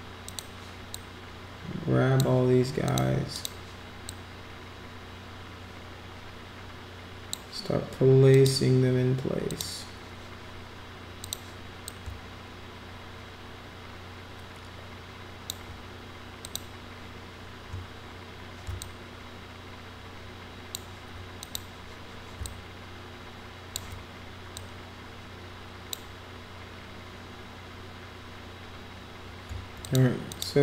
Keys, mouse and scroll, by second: 0.2 click, 0.9-2.2 drag, 2.9 click, 3.3 click, 4.0-7.3 drag, 8.3 click, 9.5 click, 11.2 click, 11.8-15.5 drag, 16.4 click, 18.8 shift+click, 21.4 click, 22.4-23.7 shift+drag, 24.5-25.9 drag, 29.8 click, 30.3 click.